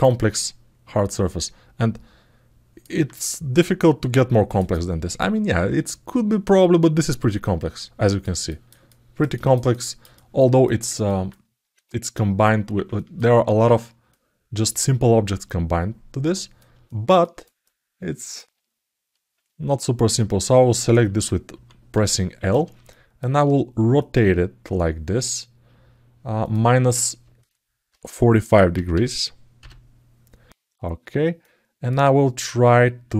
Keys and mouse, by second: 0.8-2.6 alt+middle drag, 3.3 click, 4.4-7.6 alt+middle drag, 7.7 alt+middle click, 8.2 ctrl+alt+middle click, 8.6 alt+middle click, 9.1 ctrl+alt+middle click, 9.5 alt+middle click, 9.9 alt+shift+middle click, 10.4 alt+middle click, 10.8 ctrl+alt+middle click, 12.7 ctrl+alt+middle click, 13.9-16.4 drag, 16.6 ctrl+alt+middle click, 17.4 alt+middle click, 22.6 alt+middle click, 23.8-25.0 drag, 26.2-30.3 drag, 31.2 alt+middle click.